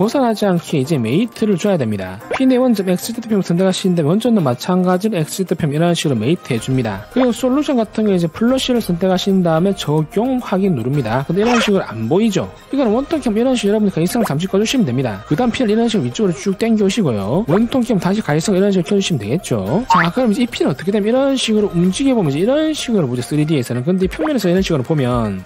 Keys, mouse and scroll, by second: 1.5 click, 2.1 click, 2.8 c, 4.4 click, 6.9 click, 9.4 click, 10.1 click, 11.1 click, 14.1 right click, 14.9 v, 16.1-17.5 drag, 17.7 click, 18.3 right click, 19.2 v, 21.1 middle click, 21.6-21.9 scroll down 4, 21.8 middle click, 21.9 middle click, 22.6-24.2 drag, 25.1 click.